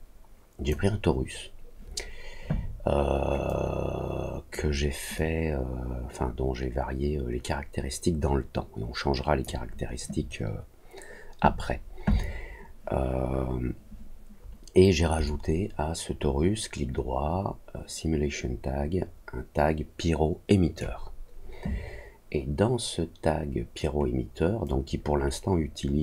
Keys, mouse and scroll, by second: 3.4-4.5 drag, 5.1-9.4 drag, 15.2-20.7 right drag, 24.6-26.0 drag.